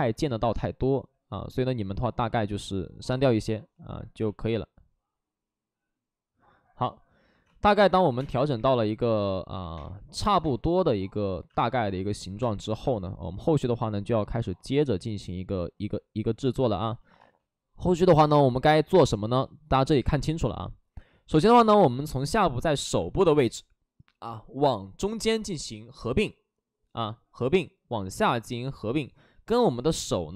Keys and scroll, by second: 1.5 alt+s, 3.6 alt+s, 4.1 ctrl+z, 7.4 space, 8.0 3, 8.1 space, 8.3 3, 9.5 ctrl+z, 9.5 3, 9.7 space, 11.8 ctrl+z, 11.8 space, 12.2 2, 17.1 space, 18.1 ctrl+z.